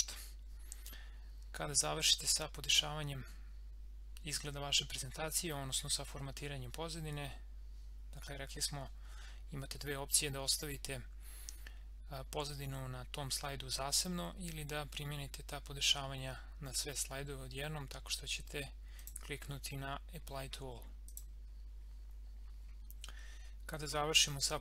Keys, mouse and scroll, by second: 19.0 click.